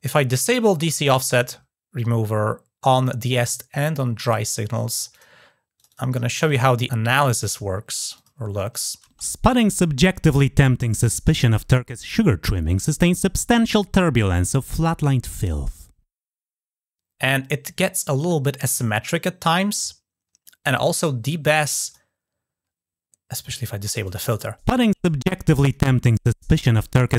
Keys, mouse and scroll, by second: 0.1 click, 4.0 click, 5.0 click, 5.6 click, 5.7 click, 6.2 click, 6.3 click, 6.9-7.3 scroll down 1, 7.3 click, 7.8 click, 8.0 click, 8.5 click, 21.7 click, 23.3 click, 23.9 click.